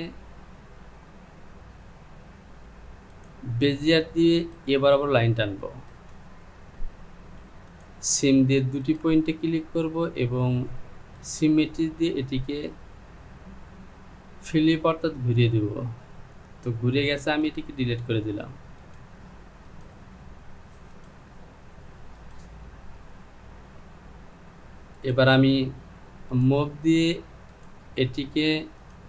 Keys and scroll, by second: 17.3 Delete.